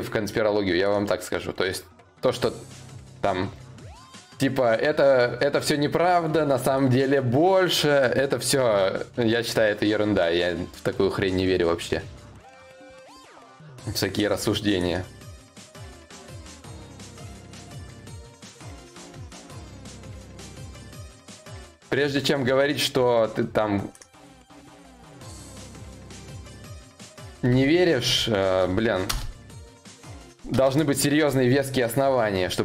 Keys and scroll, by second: 26.7 space, 27.1 n, 27.5 e.